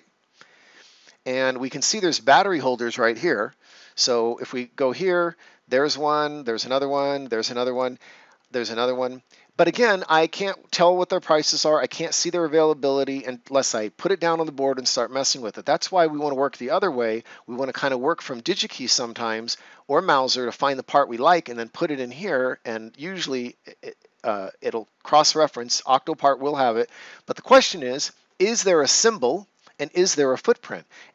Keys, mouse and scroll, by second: 3.8 scroll up 1, 4.2 click, 10.6 click.